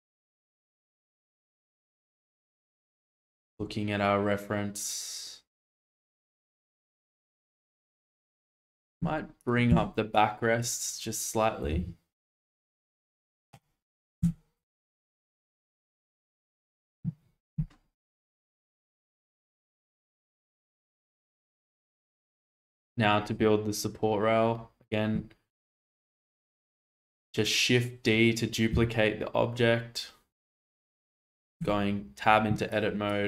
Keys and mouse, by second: 0.2-2.9 middle drag, 3.2-3.5 shift+middle drag, 7.6 shift+middle drag, 9.7 Tab, 10.3 click, 11.6 g, 11.7 z, 13.5 click, 14.2 Tab, 14.7-15.3 middle drag, 16.3 shift+middle click, 21.7 shift+middle drag, 22.7 click, 26.8 shift+d, 28.7 x, 31.6 Tab, 32.9 click.